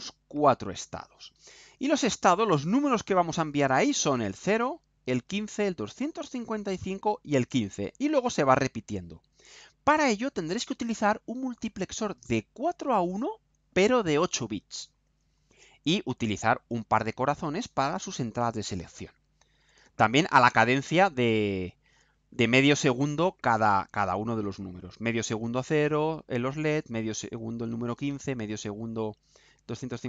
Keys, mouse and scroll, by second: 1.2 click, 3.2 click.